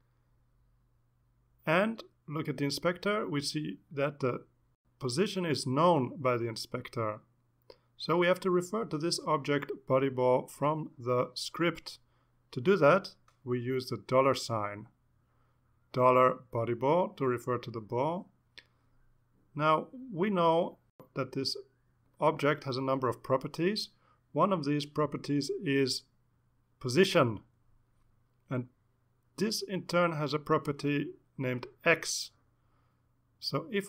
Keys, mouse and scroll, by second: 0.1 click, 12.7 click, 16.8-19.9 typing, 24.9 l, 26.1 ., 27.2 p, 27.6 o, 28.3 s, 29.0 Return, 30.3 ., 31.7 x.